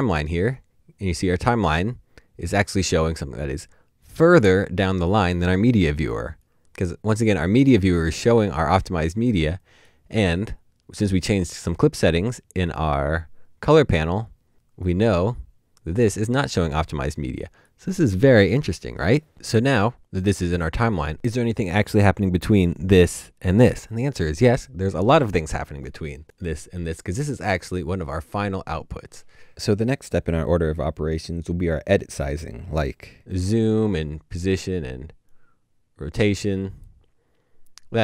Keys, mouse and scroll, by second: 6.6 double click, 26.8 right click, 26.8 double click.